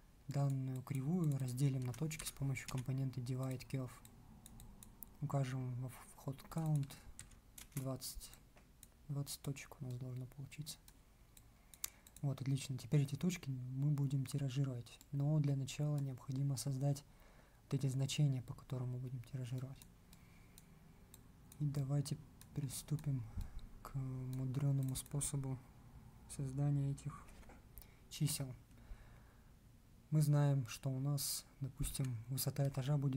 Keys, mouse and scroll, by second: 22.5-24.7 drag, 27.7-32.7 drag.